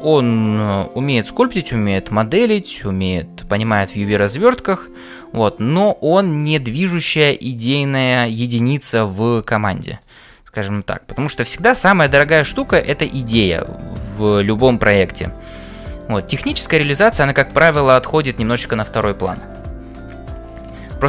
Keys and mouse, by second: 1.4 click, 1.9 g, 3.5 click, 6.1 click, 6.6 g, 8.8 click, 9.4 g, 11.4 click, 13.2-15.7 middle drag, 20.8 shift+middle click.